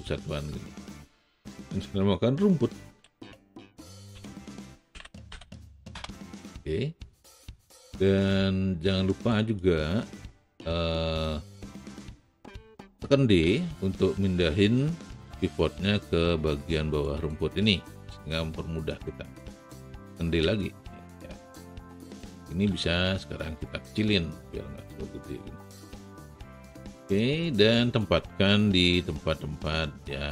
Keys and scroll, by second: 2.9-5.2 typing, 5.8 Return, 8.2 w, 13.6 d, 20.3 d, 29.0 w.